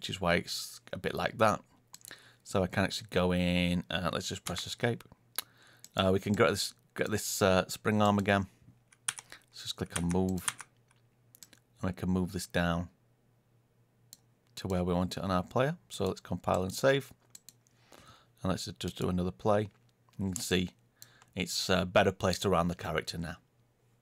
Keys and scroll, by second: 4.4 Escape.